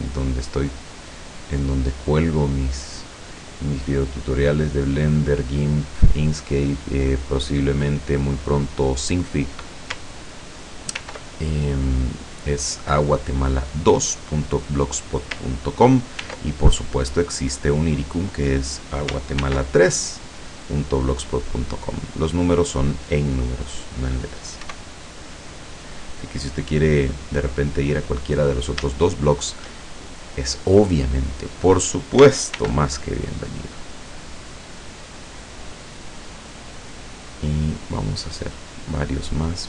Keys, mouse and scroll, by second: 2.3 click, 4.8 middle click, 4.8 scroll up 1, 6.2 middle click, 6.6-7.0 scroll up 1, 7.5-8.0 scroll down 1, 11.0 ctrl+r, 11.8 click, 14.7 click, 16.2 ctrl+r, 17.0 click, 18.5 click, 19.5 ctrl+r, 20.3 click, 21.4 click, 22.6 click, 23.7 click, 24.7 e, 27.2 click, 27.9-28.2 scroll up 1, 28.3-28.6 scroll down 1, 28.6 scroll up 1, 29.0 shift+scroll down 2, 29.1 shift+middle click, 32.6 ctrl+r, 33.1-33.6 ctrl+scroll up 3, 33.9-34.5 scroll up 4, 37.7 scroll up 2, 38.2 scroll up 2, 39.2 scroll up 2.